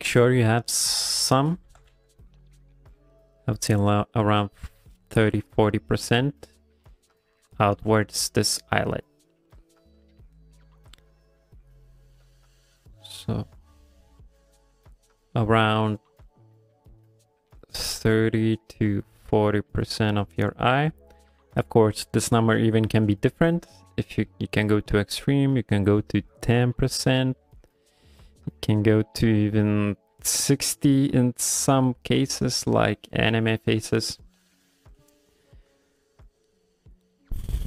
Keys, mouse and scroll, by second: 1.7 g, 1.9 f, 2.3 click, 8.8 f, 10.7 click, 12.1 click, 15.1 click, 15.9 click, 17.0 click, 17.8 click, 18.4 click, 18.6 click, 19.2 click, 19.8 click, 20.1 click, 20.6 click, 25.9 click, 26.3 click, 27.4 click, 27.8 click, 27.9 click, 29.5 click, 30.2 click, 31.1 click, 31.9 click, 32.4 click, 35.2 ctrl+middle click, 35.9 middle click, 36.5 ctrl+middle click, 36.8 middle click.